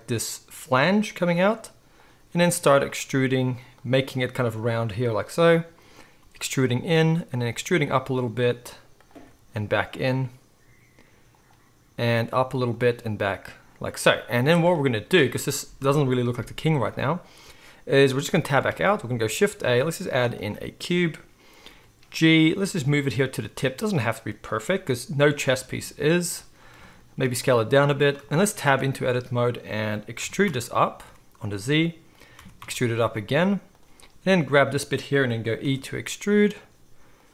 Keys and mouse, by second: 2.3 e, 3.0 e, 3.9 e, 6.2 e, 7.4 e, 8.4 e, 9.1 e, 12.1 e, 12.9 e, 14.2 z, 18.2 Tab, 18.7 alt+a, 19.2 shift+a, 21.6 g, 22.6 z, 23.5 s, 24.7 g, 26.1-29.1 shift+middle drag, 27.1 s, 28.7 Tab, 29.1-32.2 drag, 30.2 e, 32.2-34.1 middle drag, 32.4 e, 34.1-36.6 drag, 35.6 e, 36.6-37.2 middle drag, 37.2-37.3 drag.